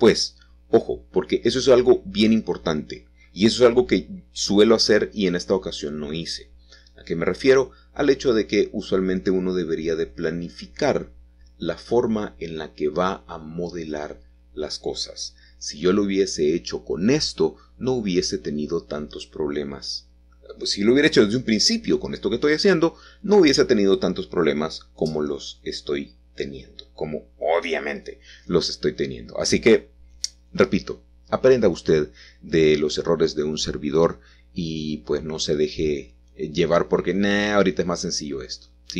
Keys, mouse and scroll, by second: 1.1 click, 3.3 middle click, 3.9-4.4 scroll up 1, 4.4 scroll down 3, 5.0 click, 6.0 h, 6.8-8.2 scroll up 5, 8.8-10.1 shift+middle drag, 10.1 shift+click, 11.4-12.7 scroll down 1, 12.5 shift+middle click, 14.5 a, 14.6 a, 15.1-15.5 scroll up 2, 16.2-16.8 scroll up 1, 16.8-21.2 shift+middle drag, 18.4-19.4 scroll down 2, 19.4-20.2 ctrl+scroll down 1, 21.2-23.3 scroll down 1, 23.3-24.5 scroll down 1, 24.6-26.0 scroll down 1, 35.5 typing, 37.4-38.9 drag, 37.7 typing.